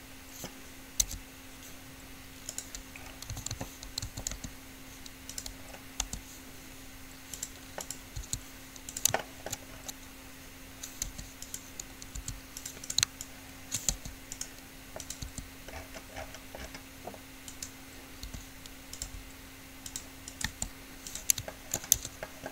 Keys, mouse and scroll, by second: 1.3 u, 3.5 a, 3.8 a, 4.2 a, 4.5 r, 6.3 g, 8.1 click, 8.3 s, 9.3 click, 11.3 r, 12.3 s, 13.1-14.8 right drag, 13.3-16.9 drag, 14.1 r, 15.5 r, 17.8 click, 18.5 r, 19.3 g, 20.7 g, 22.2 Tab.